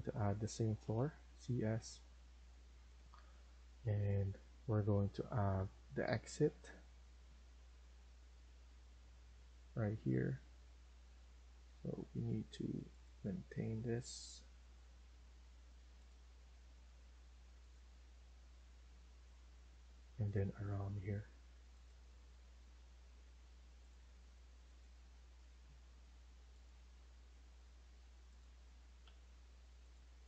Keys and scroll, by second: 0.7 c, 16.5 Escape, 27.4 Escape, 27.6 Escape, 29.0 Delete.